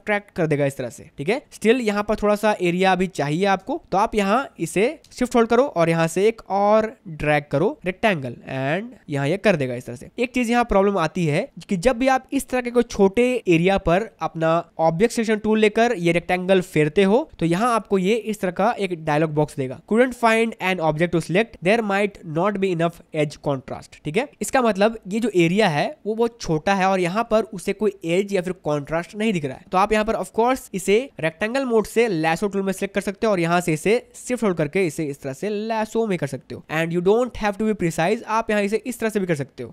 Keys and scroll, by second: 2.1 ctrl+alt+space.